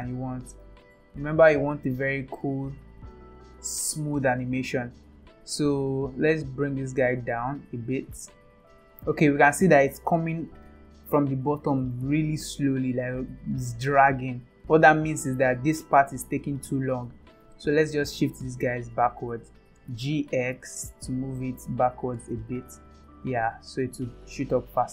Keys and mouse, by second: 0.3 space, 6.3 click, 8.2 space, 8.7 space, 9.5 click, 9.5 space, 12.6 space, 14.0 click, 17.7 click, 19.9 g, 23.5 click.